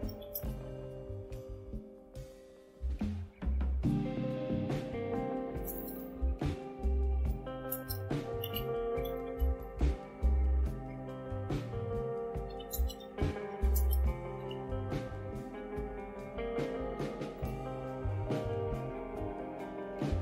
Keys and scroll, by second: 0.0-2.8 typing, 5.2-10.9 typing, 11.4 Return, 12.0-15.8 typing, 17.1-17.9 typing.